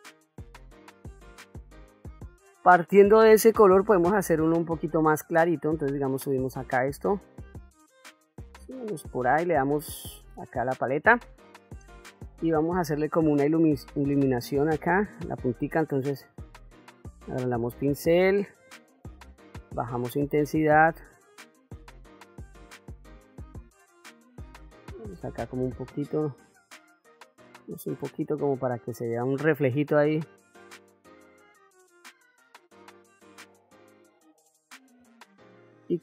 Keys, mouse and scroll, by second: 0.7 ctrl+middle click, 1.5 ctrl+middle click, 3.5 click, 5.4-6.5 drag, 7.1-8.8 drag, 10.0 click, 12.2 ctrl+middle click, 13.3 middle click, 14.0 shift+middle click, 15.8 f, 18.2 shift+f, 22.1 click, 22.7 click, 23.4 click, 24.1 middle click, 25.5 click, 26.1 click, 26.7 click, 27.7 click, 28.2 click, 28.9 click, 29.7 click, 30.2 middle click, 31.3 click, 32.2 middle click, 33.2 click, 33.7 click, 34.1 click, 34.6 click, 35.0 click.